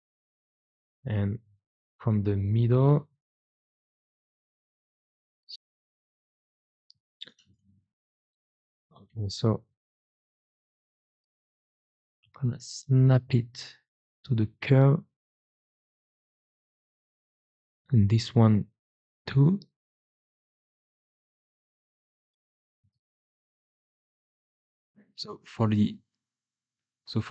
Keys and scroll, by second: 6.7 ctrl+z, 12.2 g, 18.8 g, 21.9 g, 22.7 Escape, 23.4 g.